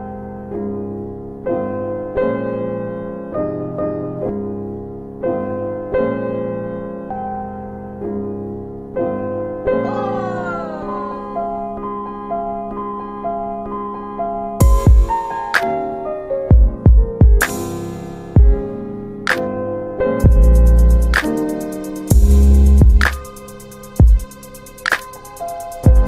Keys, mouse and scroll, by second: 0.9 alt+w, 3.2 ctrl+click, 4.3 alt+w, 5.3 alt+w, 9.2 alt+w, 11.7 click, 13.1 alt+w, 14.1 middle click, 14.4 w, 14.7-15.5 scroll up 1, 15.6 click, 17.7 alt+w, 17.9 alt+w, 18.3 alt+scroll up 1, 18.6 alt+middle click, 19.5 click, 21.0 alt+middle click, 22.1 typing, 23.5 right click, 24.7 click, 25.5-25.9 typing.